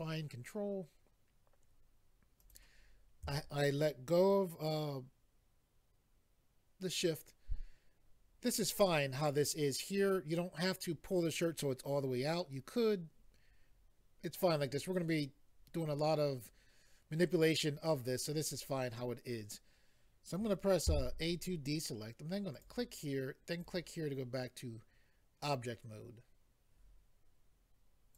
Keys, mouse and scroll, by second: 2.4 shift+click, 20.9 a, 22.5 click, 23.5 click, 23.6 click, 28.1 click.